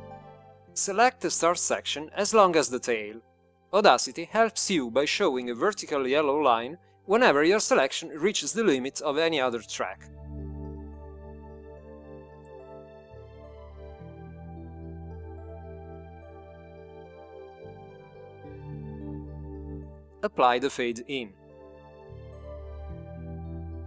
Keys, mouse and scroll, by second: 5.6 click, 7.0-9.1 drag, 10.4-22.4 drag.